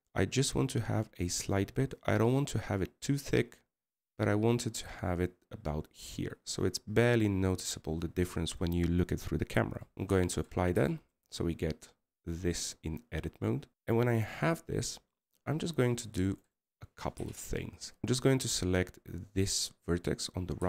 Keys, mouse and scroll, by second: 0.2 scroll up 3, 1.0 middle click, 1.4 scroll up 5, 8.1 scroll down 5, 12.0 middle click, 14.3-14.8 scroll up 2, 14.8 scroll down 2, 18.0-18.8 scroll up 2.